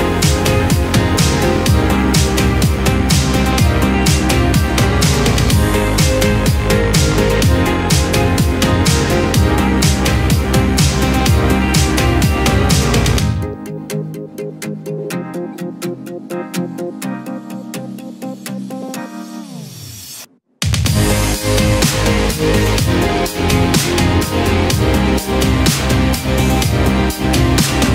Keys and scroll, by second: 5.0 ctrl+z, 11.8 ctrl+z.